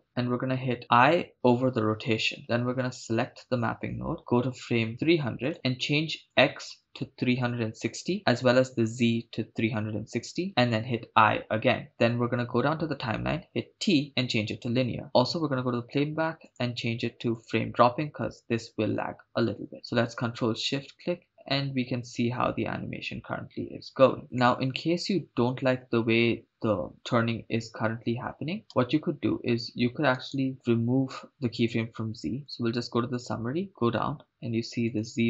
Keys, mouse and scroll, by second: 2.8 click, 4.2-4.9 scroll down 3, 5.5 click, 6.3-8.2 drag, 8.9-10.5 drag, 13.5 t, 17.6 click, 19.7 shift+space, 28.7 shift+space, 30.1 right click, 32.4 click, 33.2 click, 33.7 click, 33.8-34.8 scroll down 2, 34.9 click.